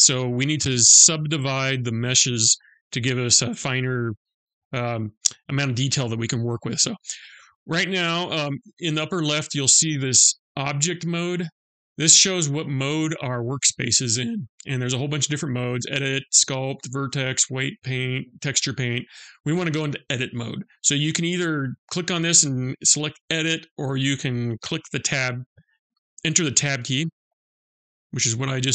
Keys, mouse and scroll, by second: 13.4 click, 21.0 click, 23.3 click, 26.9 Tab.